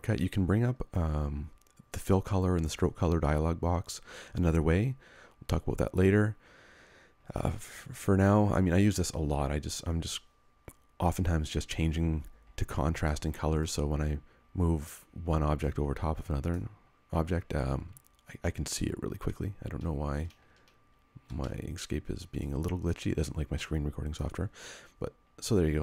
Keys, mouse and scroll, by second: 19.2 Escape, 21.2 space.